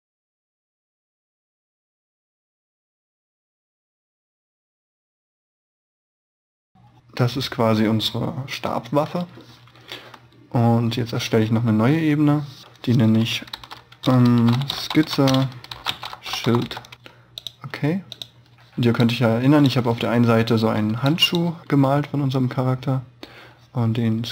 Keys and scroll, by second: 0.6 e, 1.9 b, 2.9 e, 3.3 b, 6.0 e, 6.5 b.